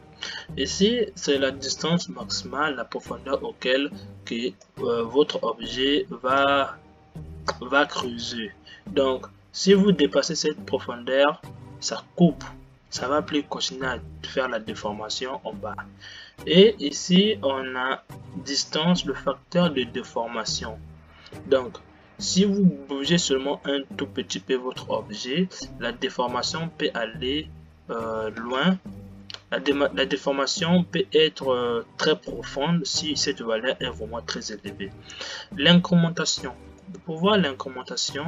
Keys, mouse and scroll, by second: 4.9-29.5 middle drag, 29.5 space, 37.1-38.2 middle drag.